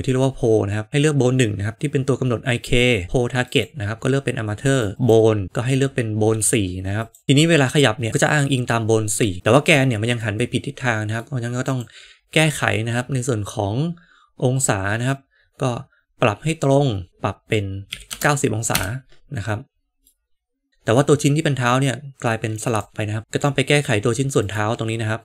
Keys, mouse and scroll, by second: 3.5-4.8 drag, 5.0-7.1 drag, 10.1-11.1 middle drag, 11.6 click, 15.0-19.3 drag, 20.0-20.7 middle drag, 21.1 middle click, 23.2 middle click.